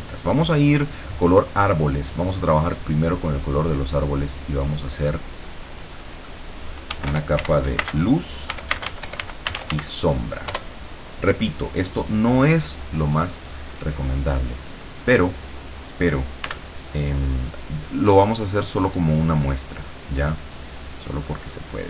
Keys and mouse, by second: 2.1 click, 4.1 click, 6.8-10.4 typing, 10.5 Return, 14.3 click, 16.5 w, 18.9 click.